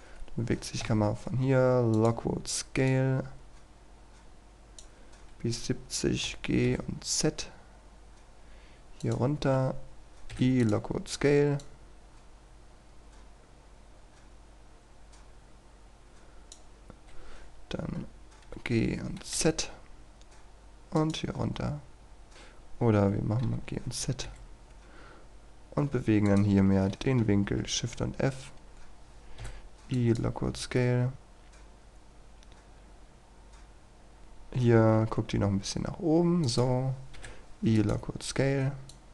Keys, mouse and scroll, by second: 0.9 i, 2.0-4.8 drag, 5.4-6.3 scroll down 1, 6.3 typing, 9.0 click, 10.4 i, 10.6-17.0 drag, 18.5 typing, 21.0 click, 21.5-22.3 scroll up 1, 22.3 scroll down 1, 23.5 typing, 26.3 click, 26.9 right click, 27.3 shift+f, 28.6 click, 29.5-34.2 drag, 34.8 shift+f, 36.5-39.1 drag.